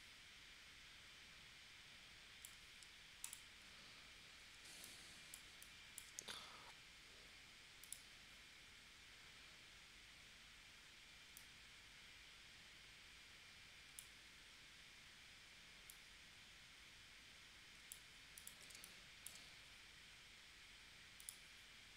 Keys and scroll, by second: 4.7 space, 18.7 space.